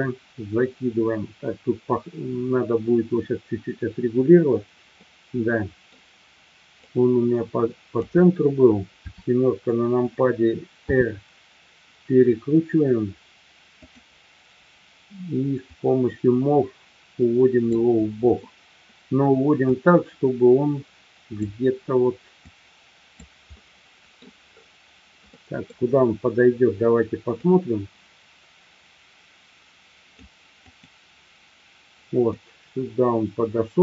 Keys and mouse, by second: 5.2-5.9 middle drag, 6.9-8.0 drag, 9.0 KP_7, 10.9 r, 15.8-17.7 drag, 19.7-21.5 drag, 22.5-23.1 drag, 23.7 middle click, 25.4 middle click, 28.9-32.8 drag, 32.8-33.8 middle drag.